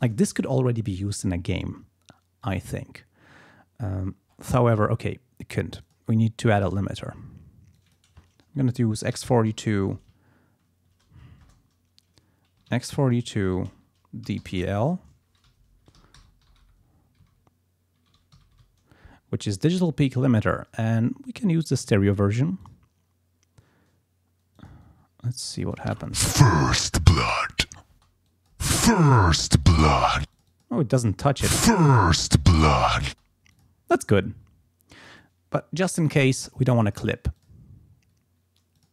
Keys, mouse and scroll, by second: 2.4 click, 4.1-4.6 scroll up 2, 5.8 click, 6.6 right click, 7.8 click, 8.9-10.5 typing, 11.5 Return, 12.4-15.3 typing, 15.5 Left, 16.0 Home, 16.4 Delete, 17.4 x, 18.4 4, 18.7 End, 21.7 click, 22.6 click, 24.6 click, 25.4 click, 25.6 space, 27.9 space, 28.3 click, 28.7 space, 30.2 space, 30.3 click, 31.3 space, 33.1 space, 33.6 click, 36.9 click, 37.4 click, 38.8 click.